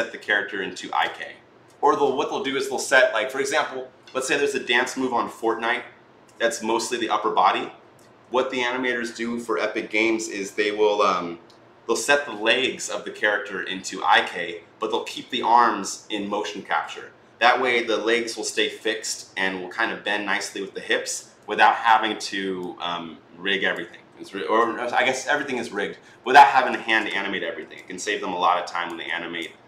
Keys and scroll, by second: 26.6 ctrl+z.